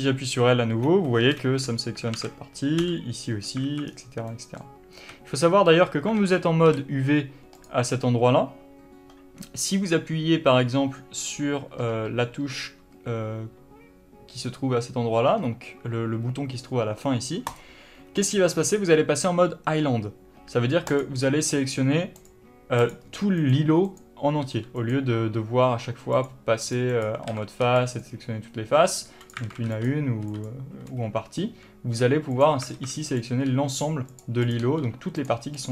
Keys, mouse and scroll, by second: 0.0 l, 1.7 alt+space, 2.4 alt+a, 4.2 scroll down 1, 4.6 middle click, 5.4-7.9 middle drag, 5.4 a, 7.9 click, 17.8 click, 18.5-21.2 middle drag, 21.2 click, 22.5 click, 23.1 click, 23.7 click, 24.2 click, 24.7 g, 25.2 click, 26.4 click, 26.9 click, 27.2 click, 27.6 alt+a, 29.7 alt+a, 32.6 click, 33.0 alt+a, 33.4 click, 33.8 g, 34.7 click, 34.9 g.